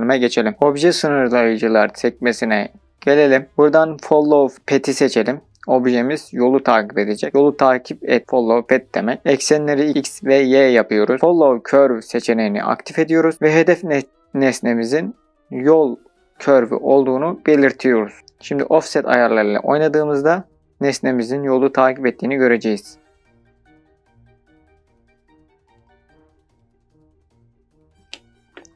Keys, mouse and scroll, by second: 1.2-8.5 drag, 8.6-13.8 drag, 21.0-27.4 drag.